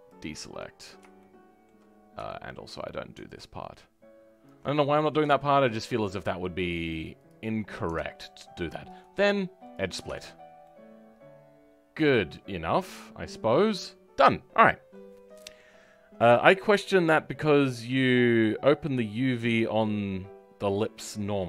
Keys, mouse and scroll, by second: 1.1 shift+middle click, 1.9-2.2 scroll up 1, 2.2 shift+middle click, 2.6-4.4 scroll up 1, 4.4 ctrl+click, 4.9-5.3 scroll down 2, 5.3-7.2 shift+middle drag, 7.2-9.7 drag, 9.7 right click, 10.0 Tab, 10.2-10.6 scroll down 4, 10.6-13.9 middle drag, 13.9-14.5 scroll down 2, 14.5-21.4 middle drag.